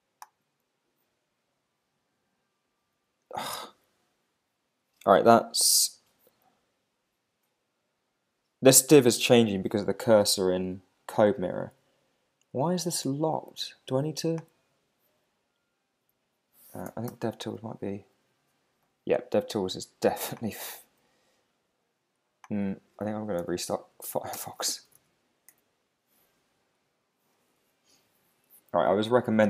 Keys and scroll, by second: 17.1 alt+super+i, 23.4 super+q, 24.3 super+space, 25.5 Return.